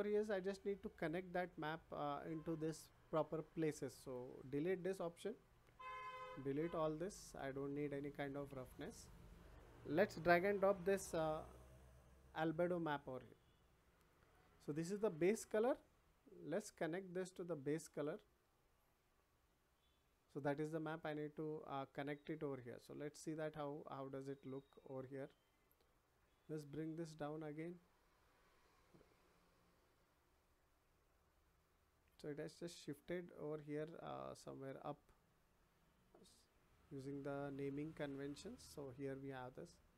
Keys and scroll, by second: 5.3 Delete, 7.3 Delete.